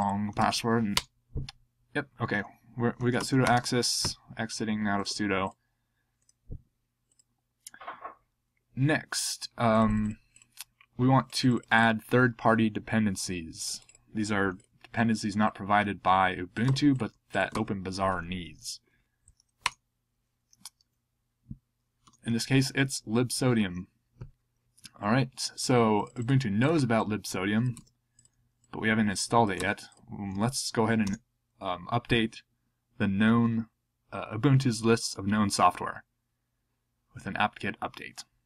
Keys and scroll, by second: 1.0 Return, 2.7-3.9 typing, 16.6 super+c, 17.5 super+v, 19.6 Return, 22.0 Return, 29.5 super+c, 30.3 super+v, 31.0 Return.